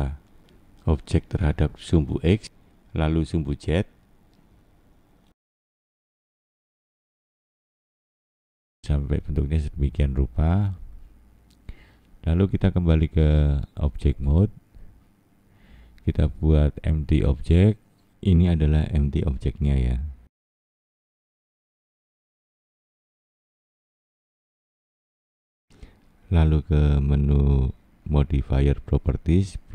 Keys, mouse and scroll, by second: 2.9 click, 5.7 middle click, 10.7 click, 14.9 click, 20.8 middle click, 22.6 click, 26.1 click, 27.6 click.